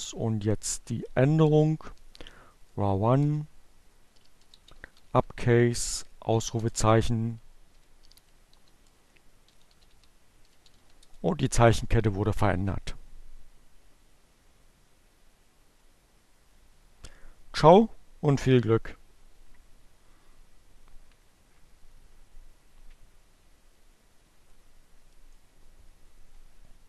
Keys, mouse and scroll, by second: 2.8-4.6 typing, 6.1-9.8 typing.